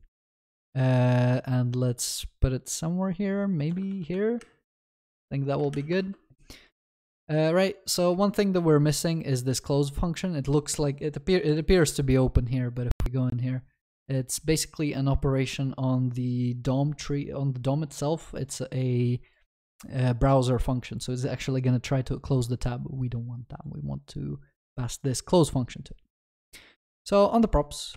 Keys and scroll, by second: 4.0 ctrl+v, 4.1 ctrl+s, 5.7 ctrl+y, 12.1 ctrl+b.